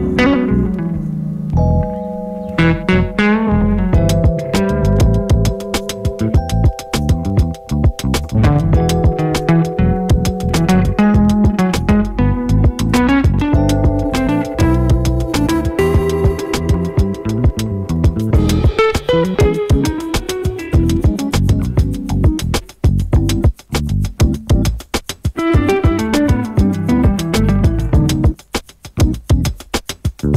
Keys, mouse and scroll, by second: 2.6 ctrl+x, 3.7 click, 5.3 ctrl+v, 6.3 click, 6.9 right click, 13.7 s, 14.3-25.8 drag, 28.0 click.